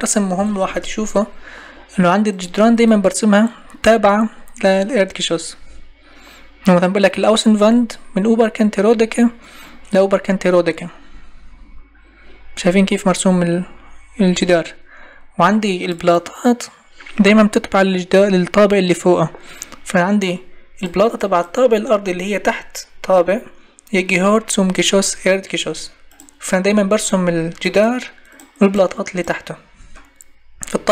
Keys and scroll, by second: 0.3 Escape.